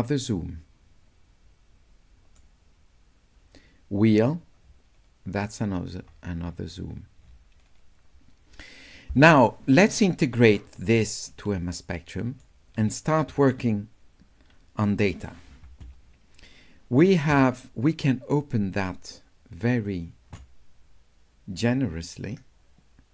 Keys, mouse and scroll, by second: 4.0-6.6 middle drag, 6.8 middle click, 7.2 middle click, 7.6 middle click, 11.0 s, 11.3-12.4 right drag, 18.4-19.8 drag, 21.6-23.1 drag.